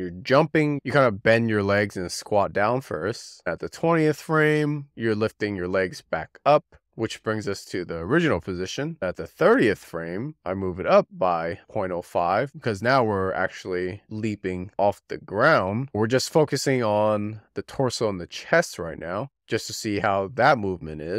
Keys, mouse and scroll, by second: 3.6-7.2 drag, 7.2 shift+d, 9.6-11.3 drag, 16.2-16.6 scroll down 1, 16.6-17.8 shift+middle drag, 17.8-19.4 scroll up 1.